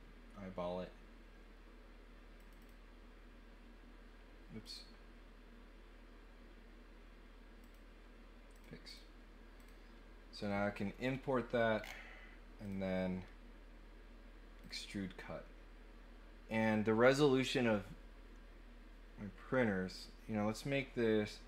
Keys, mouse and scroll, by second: 2.3 click, 2.6 click, 4.6 click, 7.6 click, 8.5 click, 8.8 click, 9.5 click, 10.4 middle click, 11.0 scroll up 1, 11.7 scroll down 1, 12.6 click, 14.6 click.